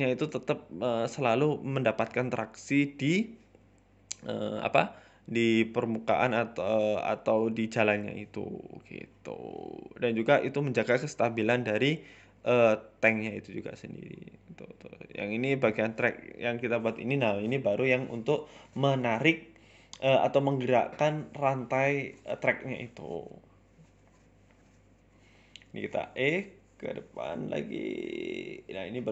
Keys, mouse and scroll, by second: 0.1 KP_1, 0.4-1.1 scroll up 2, 1.1 right click, 1.3 alt+shift+Right, 1.9 e, 2.1 s, 3.8 w, 4.6 w, 5.1 e, 5.8 s, 7.7 middle click, 8.1 scroll down 2, 8.2 shift+middle click, 10.5 ctrl+z, 10.9 middle click, 11.4 e, 13.4 e, 13.9 KP_1, 14.2 s, 15.2 middle click, 15.5 scroll up 2, 15.7 middle click, 16.5-19.1 typing, 20.3 g, 21.4 e, 21.6 s, 23.1 s, 23.3 g, 24.7 s, 25.9 e, 26.0 s, 27.1 g, 28.0 e, 28.1 s.